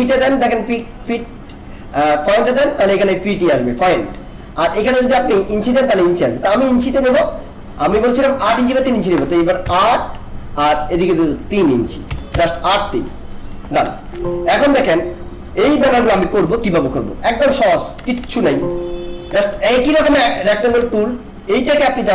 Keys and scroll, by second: 9.6 8, 12.1 3, 12.3 Return, 18.3 alt+space, 20.8 ctrl+-.